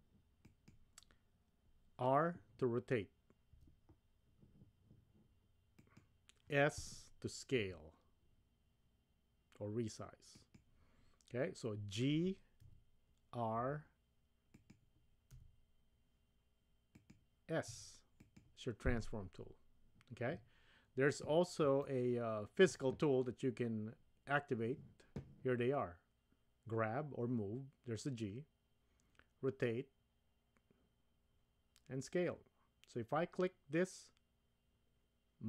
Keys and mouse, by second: 3.5 r, 7.6 s, 12.6 g, 15.3 r, 17.7 s, 21.8-22.7 shift+middle drag.